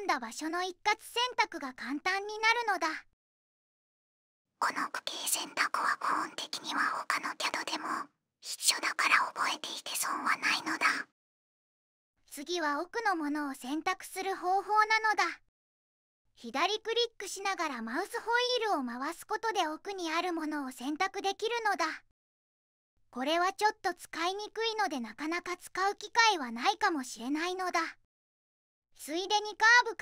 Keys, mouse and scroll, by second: 11.4 middle click, 14.6 click, 17.9 click, 18.4-18.8 scroll up 4, 19.5 click, 19.5 scroll up 2, 20.3 scroll up 2.